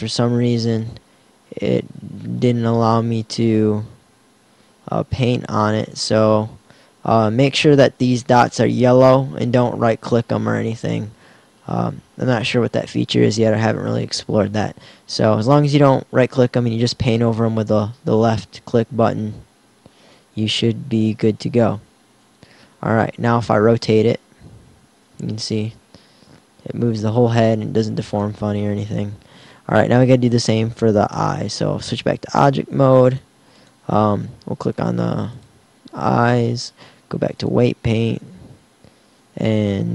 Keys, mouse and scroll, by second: 5.0 ctrl+z, 5.5 ctrl+z, 17.8-19.8 drag, 23.8 r.